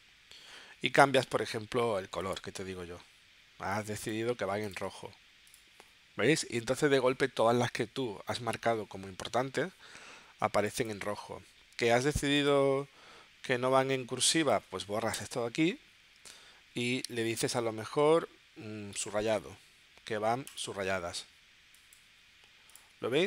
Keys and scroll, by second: 15.1 BackSpace.